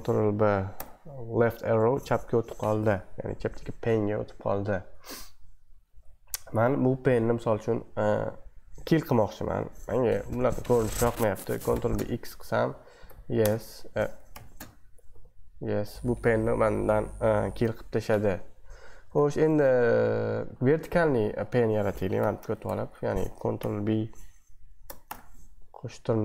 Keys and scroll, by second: 0.7 Left, 4.7 super+2, 5.9 super+1, 11.7 ctrl+b, 11.9-13.5 typing, 14.3 ctrl+b, 14.5-15.6 typing, 17.7 super+2, 19.1 super+1, 19.6 super+2, 20.6 super+1, 22.2 ctrl+b, 22.6 Left, 23.6 ctrl+b, 25.1 ".